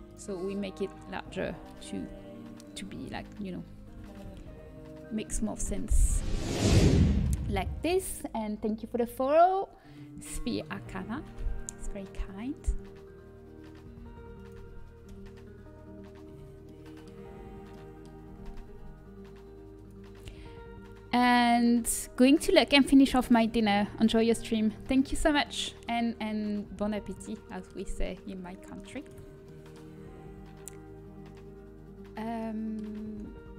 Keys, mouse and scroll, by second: 2.8 a, 5.6 l, 5.6 s, 14.4 Return, 15.0 KP_1, 17.3 z, 18.4 g, 24.0-27.0 middle drag, 27.0-28.8 drag, 27.4-28.8 middle drag, 29.4-31.2 middle drag.